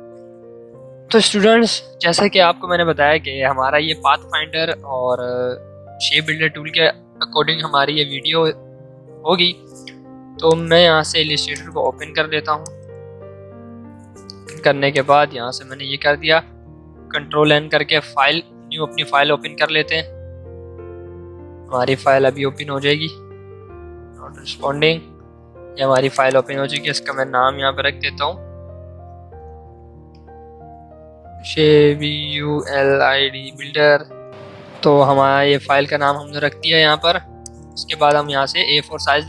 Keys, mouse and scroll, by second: 10.4 click, 10.4 click, 14.9 click, 34.9 typing.